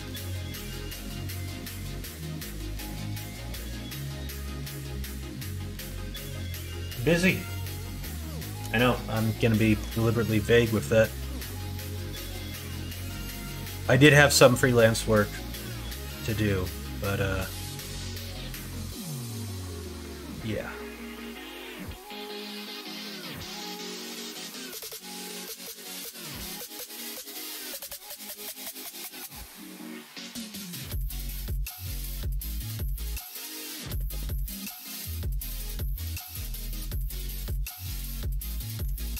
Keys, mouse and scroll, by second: 10.7 middle click, 11.4 middle click, 12.0 middle click, 12.6 middle click, 13.8 middle click, 14.2 middle click, 14.6 middle click, 15.6 middle click, 16.3 middle click, 17.2 middle click, 17.7 middle click, 18.0 middle click, 18.8 shift+middle click, 19.2 middle click, 19.6 middle click, 19.9 shift+middle click, 20.4 middle click, 38.5 middle click, 39.0 shift+middle click.